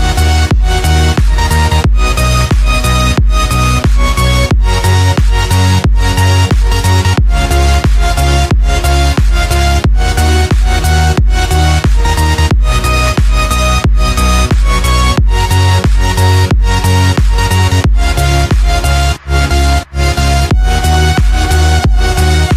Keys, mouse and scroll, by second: 0.2-2.5 drag, 8.8 click.